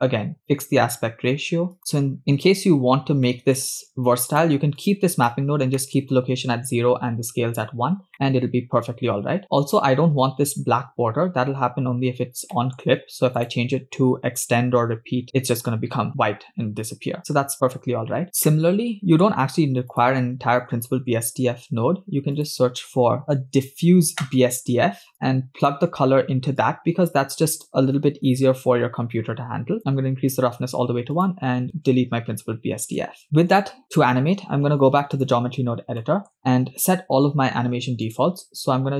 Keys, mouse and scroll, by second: 0.9 scroll up 3, 1.7 click, 3.2-3.7 middle drag, 4.3 click, 4.8 click, 5.8 middle click, 7.8 scroll down 2, 8.3 middle click, 9.7 scroll down 1, 11.9-12.5 scroll up 3, 12.5 middle click, 13.4-15.2 drag, 18.2 scroll down 6, 18.4 middle click, 19.3 scroll up 1, 19.9 click, 20.8 scroll down 2, 21.8 shift+a, 26.6-27.7 drag, 28.4-30.4 drag, 31.1 click, 32.1 x, 33.0 click, 33.2 scroll down 6, 33.3 middle click, 33.9-35.3 drag, 36.0 middle click, 38.0 click.